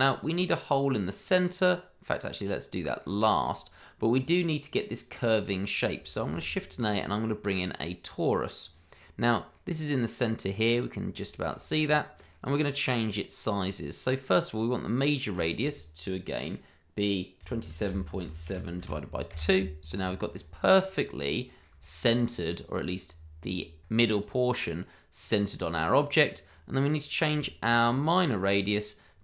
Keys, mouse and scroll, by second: 2.5 click, 3.2 shift+middle click, 6.1 shift+a, 8.7 click, 9.5 middle click, 10.6 scroll up 1, 11.2 shift+middle click, 11.3 middle click, 11.4 shift+middle click, 11.8-12.3 scroll down 1, 12.3 middle click, 17.6-18.8 typing, 19.3 Return, 20.3-20.6 scroll up 1, 20.6 middle click, 21.7 shift+middle click, 21.8 scroll up 1, 22.0 middle click, 23.2 click, 23.5 shift+middle click, 23.7-24.1 scroll up 1, 24.1 shift+middle click, 24.4-25.5 scroll up 1, 25.5-26.2 scroll down 1, 26.5 middle click, 27.5 shift+middle click, 28.6-29.0 scroll down 1.